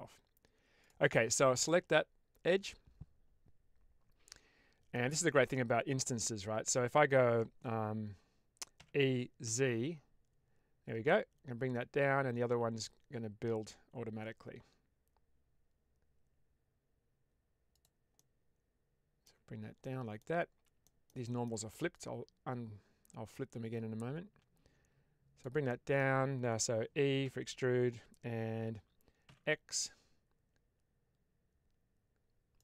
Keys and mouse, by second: 1.5-4.8 middle drag, 8.7 e, 9.3 z, 17.6 click, 18.0-19.2 middle drag, 19.7 middle click, 20.8 shift+middle click, 25.6 middle click, 27.1 e, 29.2 x, 32.4 click.